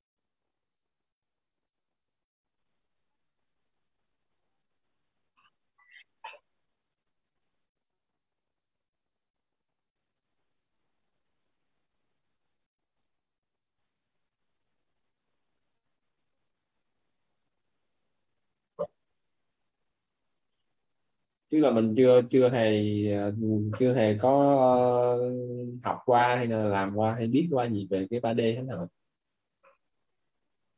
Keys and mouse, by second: 2.7 click, 5.3 click, 6.4-8.9 typing, 11.3-13.6 typing, 30.4 space.